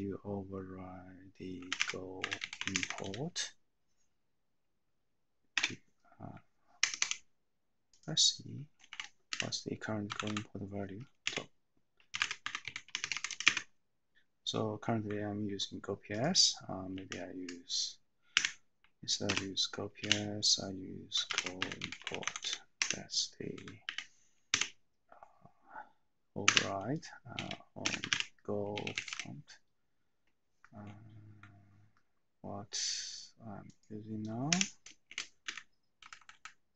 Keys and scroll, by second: 1.6-3.5 typing, 5.8 =, 6.8 Escape, 7.0 Escape, 9.3 Up, 10.1 Left, 10.3 Left, 11.3-13.9 typing, 17.1 a, 18.5 ', 21.1-24.6 typing, 23.5 Right, 26.6 Return, 27.9-29.5 typing, 35.1 :, 35.4 Up, 36.0 Left, 36.1 Left, 36.3 Left.